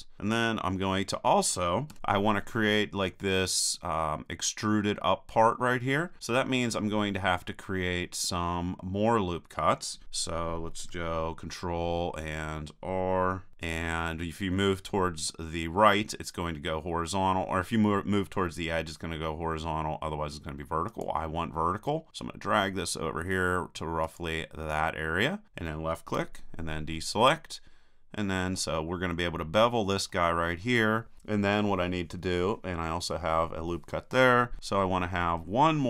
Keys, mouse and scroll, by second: 2.0 KP_1, 13.5 ctrl+r, 24.2-25.6 drag, 26.2 a, 26.9-28.3 drag, 28.3-29.4 middle drag, 30.1-31.6 middle drag, 34.6-35.8 middle drag.